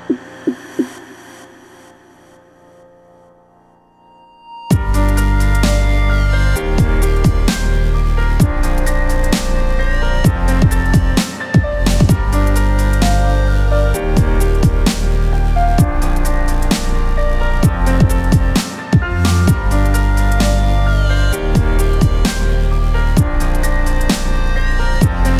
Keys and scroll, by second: 5.0 space, 9.0 space, 13.0 ctrl+space, 13.2 ctrl+KP_0, 15.2 alt+KP_Decimal.